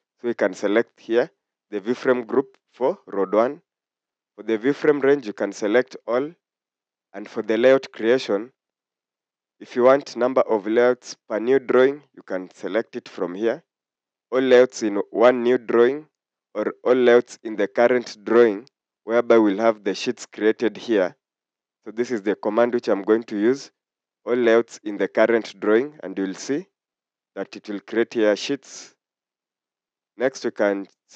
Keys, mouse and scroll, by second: 7.2 click, 28.8 click.